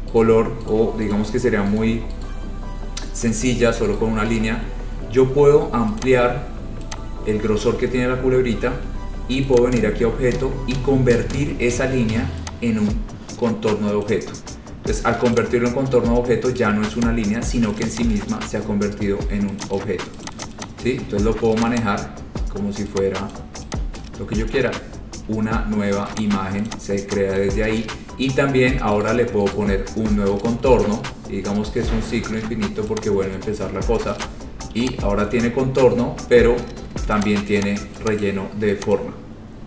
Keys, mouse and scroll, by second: 0.4 right click, 0.9 right click, 1.3 right click, 2.0 right click, 2.4 right click, 3.5 right click, 4.1 right click, 4.5 right click, 6.1 click, 7.1 click, 8.1-8.4 scroll, 9.7 click, 14.2 click, 15.6 click, 16.2 Escape, 17.2 click, 18.0 click, 18.2 click, 18.5 scroll, 18.7 scroll down 4, 19.9 click, 20.4 click, 20.6 click, 20.8 click, 20.8 scroll, 21.8 click, 21.9 click, 23.5 click, 24.2 click, 24.6-25.0 scroll, 26.4 click, 26.8 click, 27.6 click, 29.2 right click, 29.7 right click, 30.6 right click, 31.0 right click, 33.2 click, 34.4 click, 35.0 click, 35.8-36.3 scroll, 37.4 click, 37.8 click, 38.4 click, 38.4 scroll down 2, 39.2 click.